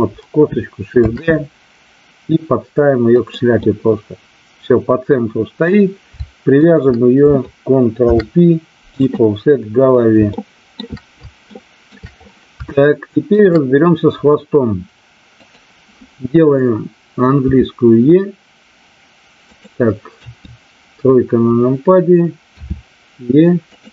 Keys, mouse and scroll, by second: 1.0 shift+d, 3.1 click, 3.6-5.7 middle drag, 6.6 shift+click, 8.0 ctrl+p, 10.3 shift+middle click, 11.4 shift+middle click, 12.7 shift+middle click, 15.3 click, 17.4 e, 19.4 click, 20.1 KP_3, 22.4 e, 23.6 click.